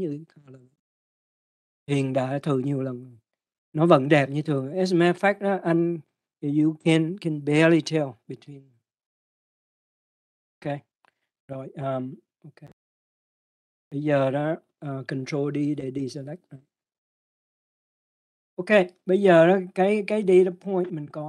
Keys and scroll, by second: 18.0 ctrl+d.